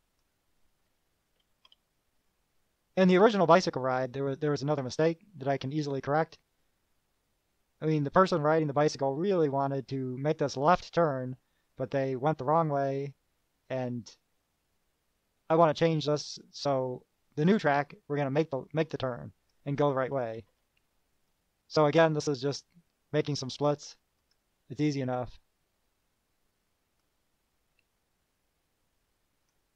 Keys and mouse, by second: 1.6 KP_Add, 19.4 click, 20.3 KP_Add, 21.5-22.1 drag, 24.4 click, 27.2 click, 29.6 click.